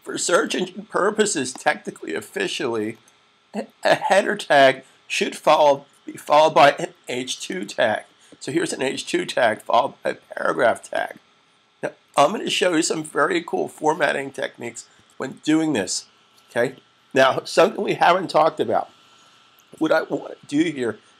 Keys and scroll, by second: 7.2 2, 14.7 super+s.